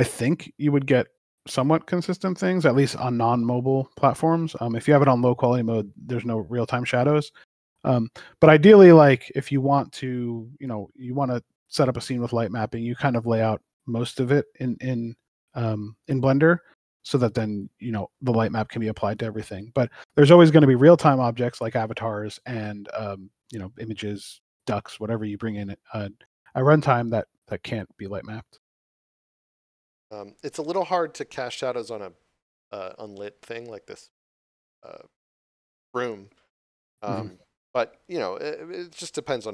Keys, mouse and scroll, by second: 14.6 right click, 15.2 click, 16.0 g, 17.5 click, 26.3 click.